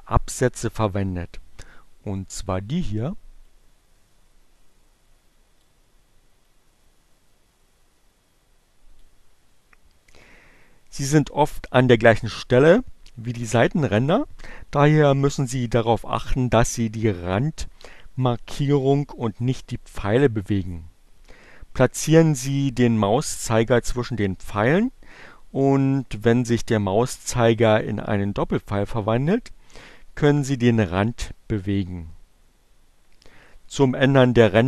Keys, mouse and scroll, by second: 2.9-5.4 drag, 6.1-8.6 drag.